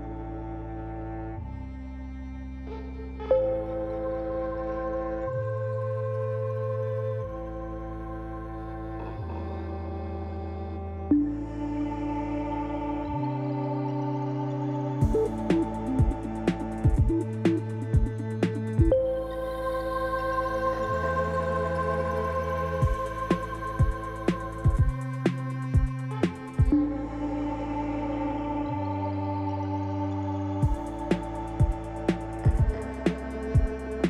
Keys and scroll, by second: 0.6 shift+d, 1.6 Escape, 4.0 alt+a, 6.0 shift+d, 8.4 shift+d, 10.6 shift+d, 13.0 shift+d, 15.0 shift+d, 19.3 Tab, 22.3 ctrl+r, 23.1 Return, 26.2 x, 27.9 3, 28.4 shift+z.